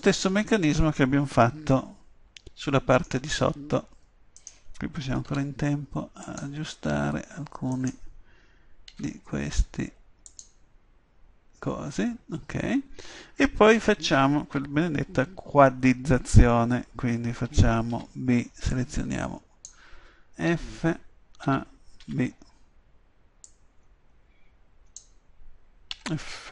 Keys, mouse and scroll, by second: 1.8-5.3 drag, 5.3 g, 6.2 click, 8.5-9.5 right drag, 9.0 g, 10.4-12.3 drag, 17.5 a, 17.9 b, 20.5 f, 21.5 a, 22.0 b, 26.0 f.